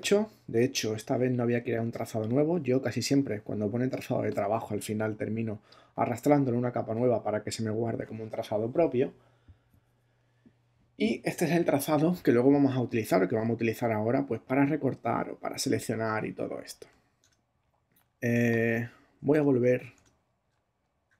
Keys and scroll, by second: 17.2 super+Tab, 19.3 super+Tab.